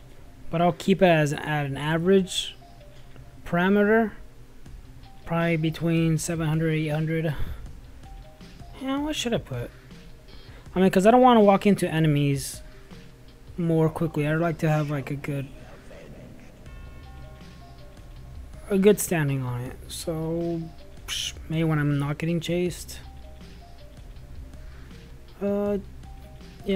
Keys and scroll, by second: 5.6 space, 16.3 y, 21.9-22.8 typing.